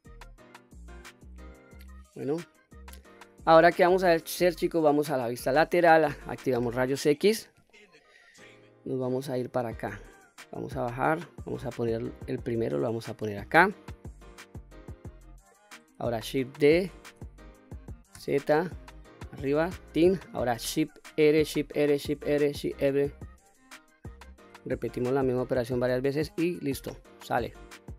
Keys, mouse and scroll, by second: 3.2-3.8 middle drag, 5.1 KP_3, 6.2 q, 6.8-7.2 scroll up 3, 7.7-8.2 shift+middle drag, 9.1-10.4 drag, 11.1-13.4 drag, 14.1-15.4 drag, 16.7 shift+d, 18.2 z, 19.8 click, 21.1-24.5 typing, 26.0-26.3 scroll down 1, 26.3 middle click, 27.0-27.9 scroll down 1.